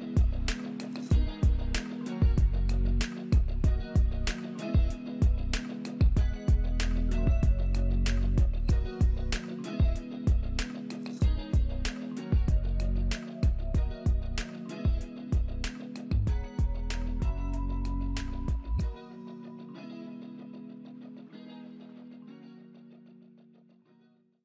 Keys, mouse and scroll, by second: 3.5 right click, 5.6 alt+middle click, 11.8 scroll down 1, 12.2 alt+middle click, 17.6-18.2 scroll up 2, 18.2 middle click, 23.7 right click.